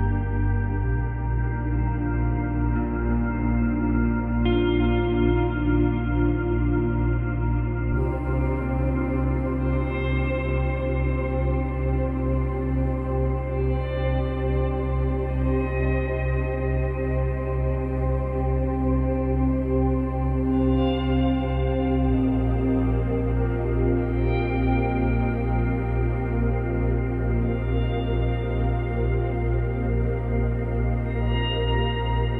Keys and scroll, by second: 8.6 space, 10.7 space, 16.2 space, 17.8 space, 21.4 space, 23.8 space, 25.8 space, 27.6 space, 29.2 space, 30.9 space.